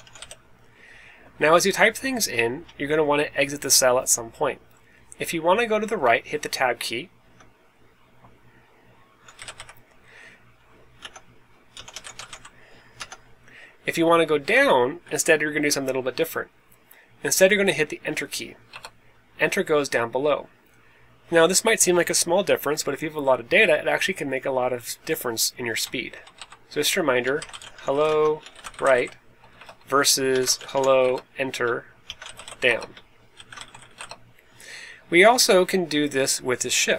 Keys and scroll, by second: 0.0-0.6 typing, 7.2 Tab, 9.1-10.0 typing, 11.0 Tab, 11.4-12.7 typing, 12.9 Tab, 14.1-15.9 typing, 18.4-19.2 typing, 25.8 Left, 26.0 Left, 26.3 Down, 27.1-34.4 typing, 29.5 Return.